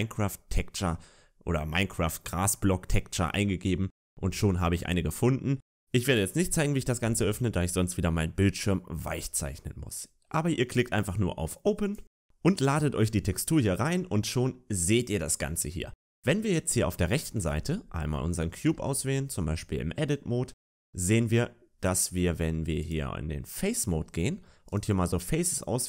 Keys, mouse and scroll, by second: 12.0 click, 17.3 Tab, 17.3-18.4 scroll up 2, 18.4 a, 18.6 a, 20.4 Tab, 20.9 Tab, 22.7 click, 24.5 right click.